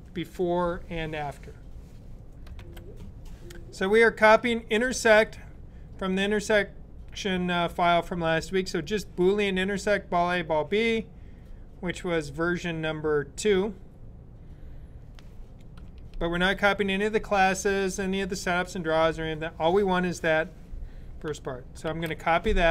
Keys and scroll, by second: 2.4 super+b, 21.7 super+c.